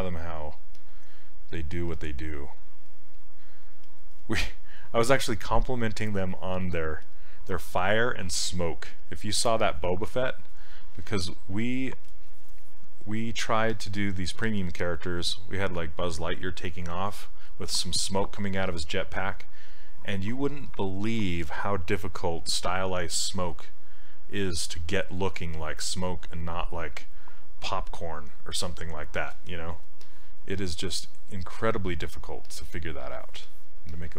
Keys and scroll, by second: 1.9 s.